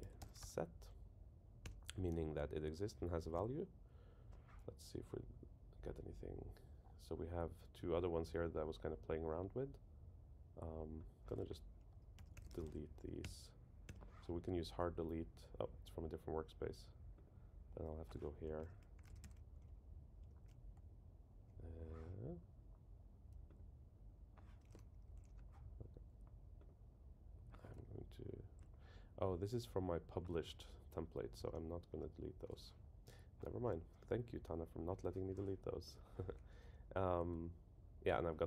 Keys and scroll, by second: 1.6 Return, 2.1 Down, 2.7 Down, 12.1 super+k, 13.2 Return, 18.6 super+k, 19.6 Return, 31.4 super+[, 37.3 super+Left.